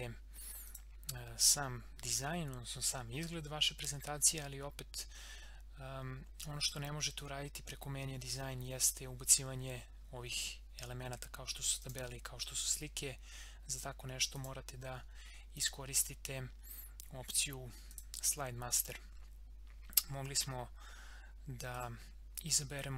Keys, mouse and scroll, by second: 0.7 click, 2.9 scroll down 1, 11.8 click, 14.3 click, 14.7 scroll down 1, 15.5 click, 17.9 click, 21.7 click.